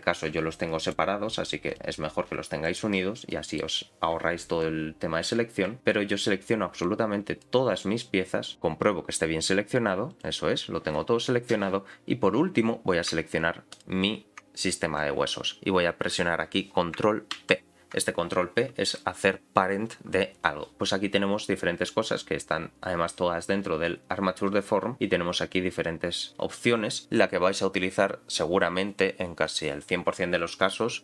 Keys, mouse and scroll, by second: 0.3 g, 1.7 click, 2.4 g, 3.0-3.4 scroll down 4, 3.3 middle click, 4.6 click, 5.8-7.6 shift+drag, 7.8 shift+click, 8.5 middle click, 8.5-10.9 scroll down 6, 8.5 g, 10.9-12.7 scroll up 2, 12.7-13.1 scroll up 4, 13.7 shift+click, 17.3 ctrl+p.